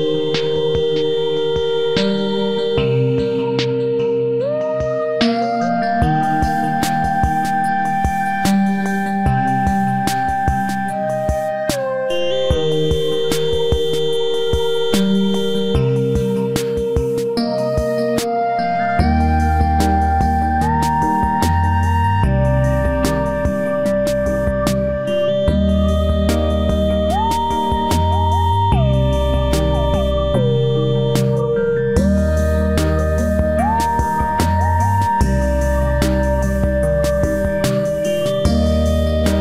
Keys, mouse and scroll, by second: 0.6 z, 1.2 z, 1.9 click, 2.2-3.7 right drag, 2.2 c, 10.5 c, 11.4 z, 12.1 z, 13.4 i, 14.0-15.8 drag, 15.7 i, 16.6 KP_Decimal, 17.1 middle click, 18.0 z, 19.0 click, 19.8 click, 20.0 KP_3, 20.2 KP_Decimal, 21.5 Tab, 22.2 z, 22.5 Tab, 23.9-26.6 middle drag, 26.8-28.6 right drag, 27.1 c, 33.6 c, 34.2-35.8 right drag, 34.9 i, 35.8 middle click, 36.2 z, 37.0-38.3 drag, 38.3 KP_3, 38.9 z, 39.2 c.